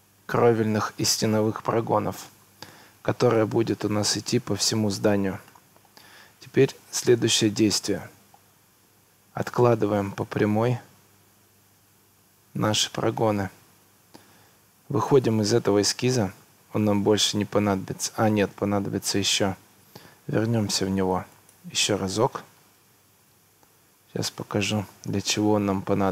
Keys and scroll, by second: 2.8 Escape, 14.0 Escape, 19.2 Escape, 22.4 Escape.